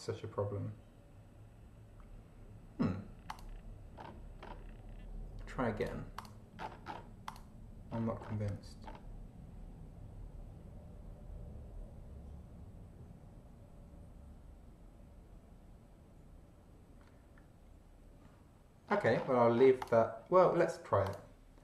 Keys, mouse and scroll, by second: 3.3 click, 4.0-4.6 scroll up 2, 5.8 click, 6.2 click, 6.6-7.1 scroll down 1, 7.3 click, 7.9-8.5 scroll up 2, 8.9 scroll up 1, 18.9-19.5 scroll down 1, 19.8 click, 21.1 click.